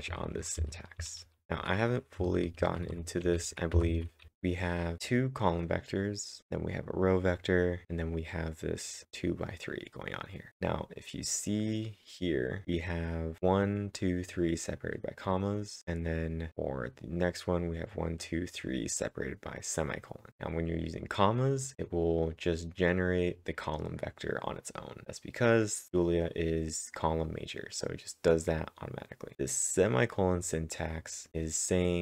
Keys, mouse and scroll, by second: 0.0-1.2 typing, 4.0-4.7 typing, 6.4 Return, 6.4-7.8 scroll down 2, 11.6 click, 11.6-11.9 scroll down 1, 12.6 double click, 13.4 click, 13.5 click, 14.2 click, 14.3 click, 15.1 click, 29.3 click, 31.3 click.